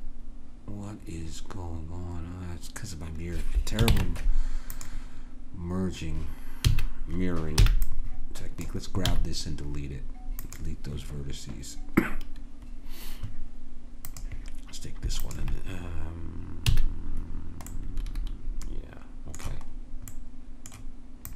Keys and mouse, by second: 0.5-2.3 middle drag, 3.9 ctrl+Tab, 6.7 a, 7.7 b, 9.1 x, 12.3-14.1 middle drag, 14.1-18.2 drag, 16.7 a, 21.2-21.3 drag.